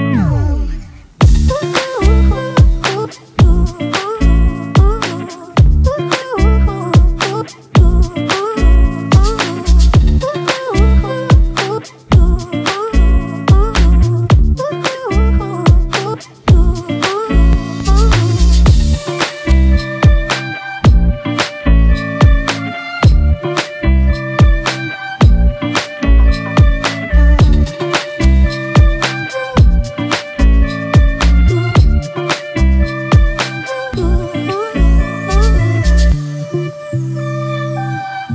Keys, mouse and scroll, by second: 0.8 right click, 12.8 ctrl+t, 13.8 alt+shift+click, 14.8 alt+s, 15.1 alt+shift+click, 19.7 alt+s, 19.9 alt+shift+click, 20.4 alt+shift+click, 22.8 Return, 31.1-33.0 typing, 36.2 typing.